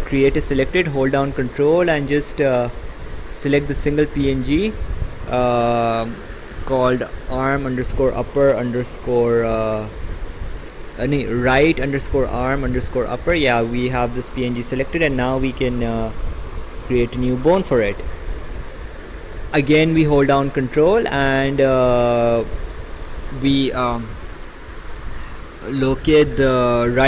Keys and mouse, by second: 3.8 ctrl+click, 16.7 click.